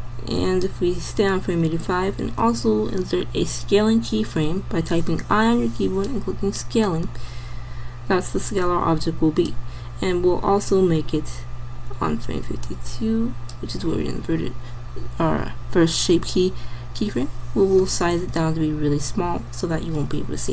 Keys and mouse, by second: 2.5 i, 9.5-11.1 drag, 18.3 s.